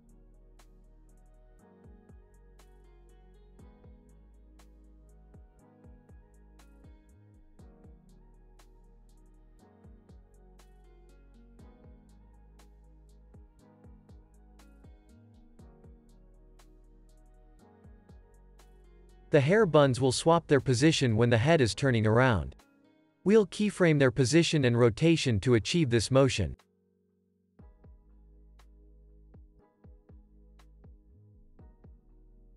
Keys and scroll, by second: 8.7 space, 10.5 space, 19.3 super+a, 22.1 u, 25.3 super+s.